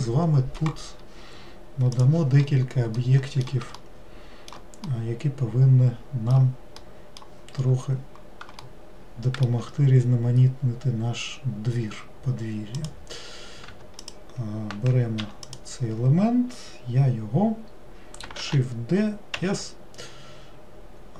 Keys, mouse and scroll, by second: 3.1-7.8 middle drag, 7.8-8.8 scroll up 2, 8.8-11.8 shift+middle drag, 12.9 click, 14.1 click, 15.6 click, 18.5 shift+d.